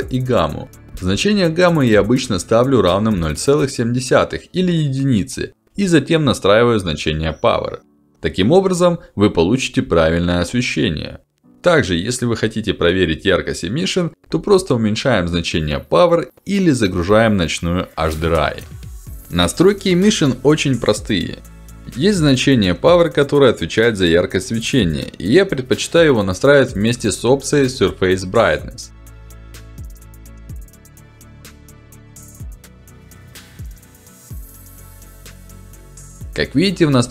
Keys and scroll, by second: 2.9 7, 3.1 Return, 5.2 1, 5.6 Return, 18.8 Return, 22.9 1, 23.3 0, 23.6 Return, 25.1 1, 25.5 Return, 25.5 \.